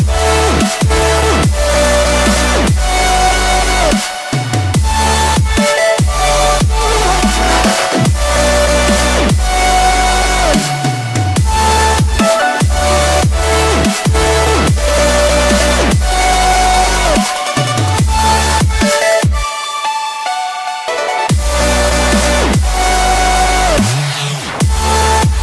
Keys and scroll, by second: 2.3 Return, 2.9 Up, 3.4 Down, 6.9 Return, 7.6 Return.